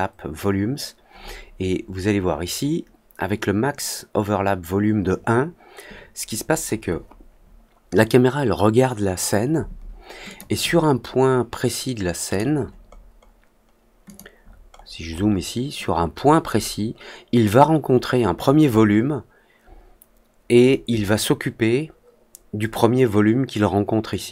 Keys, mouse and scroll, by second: 10.2 click, 12.2 click, 12.8-13.3 scroll up 2, 14.0 click, 14.3-14.9 scroll up 2, 15.0 middle click.